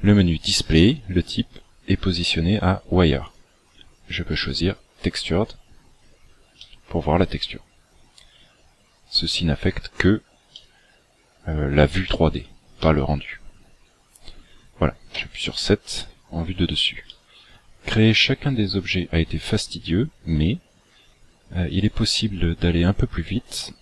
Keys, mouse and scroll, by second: 3.2 click, 6.5 middle click, 10.1-10.4 scroll up 3, 10.5 shift+middle click, 11.2 scroll up 2, 12.0 shift+middle click, 12.7 middle click, 13.5-14.1 scroll down 9, 15.1 KP_7, 16.5 scroll up 3, 17.1 shift+middle click, 21.7 right click.